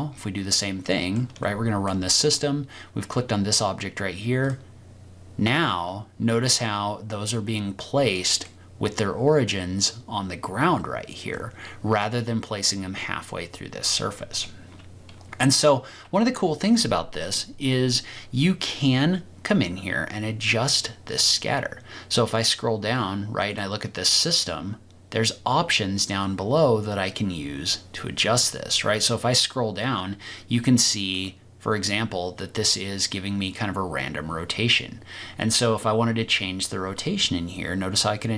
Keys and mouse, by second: 1.0 middle click, 1.4-1.8 shift+middle drag, 4.4 click, 5.7-8.4 middle drag, 11.3-12.0 middle drag, 14.4-15.6 middle drag, 28.4 click, 31.1 click, 37.0-38.3 drag.